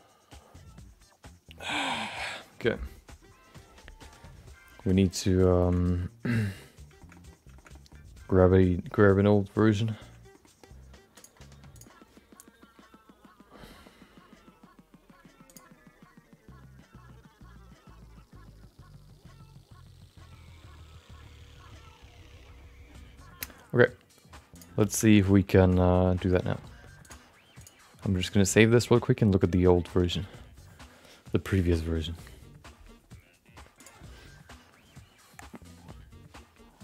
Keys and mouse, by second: 5.5 shift+middle click, 5.7 middle click, 6.3 shift+middle click, 6.4 middle click, 7.0 shift+middle click, 7.1 middle click, 7.5 shift+middle click, 7.7 middle click, 10.3 middle click, 11.2-13.5 drag, 25.2 middle click, 25.6 shift+middle click, 25.8 middle click, 26.2 shift+middle click, 27.0-30.5 drag.